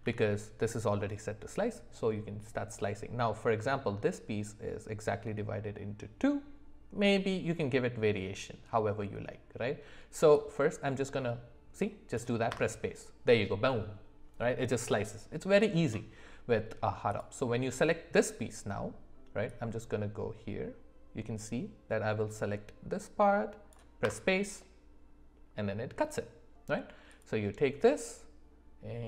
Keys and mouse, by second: 0.0 d, 12.1 click, 19.8-25.8 drag, 27.2-29.0 drag.